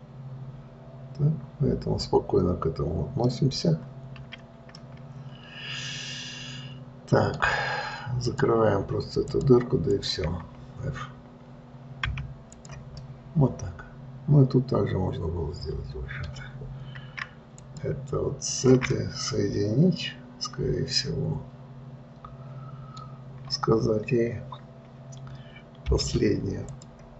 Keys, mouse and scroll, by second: 4.1-5.0 scroll up 2, 5.2-8.1 middle drag, 8.6 click, 9.5 shift+click, 10.3 shift+click, 12.4 f, 12.9 click, 13.3-16.3 middle drag, 18.0 click, 18.9 shift+click, 19.3-22.3 middle drag, 24.6-25.8 scroll up 1, 26.2 m.